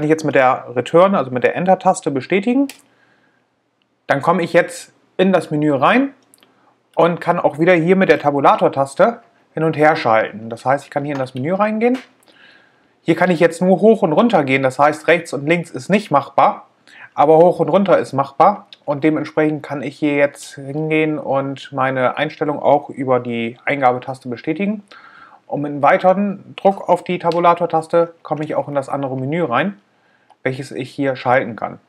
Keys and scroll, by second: 2.8 Return, 9.6 Tab.